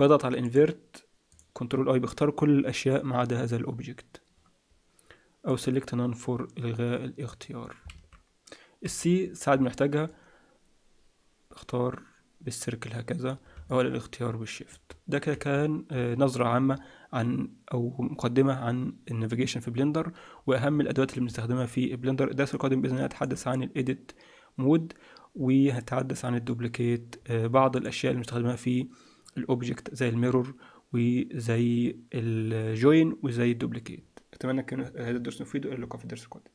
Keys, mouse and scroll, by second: 0.4 click, 5.4 click, 7.9 alt+a, 8.8 c, 16.1-17.5 scroll down 5, 16.6-17.5 scroll up 3, 19.3-19.8 scroll up 2, 20.3-21.2 scroll down 1, 21.2-21.6 scroll down 1, 21.6 middle click, 25.2-26.0 scroll down 1, 26.0-27.7 scroll down 3, 27.7 click, 27.7-28.5 scroll up 3.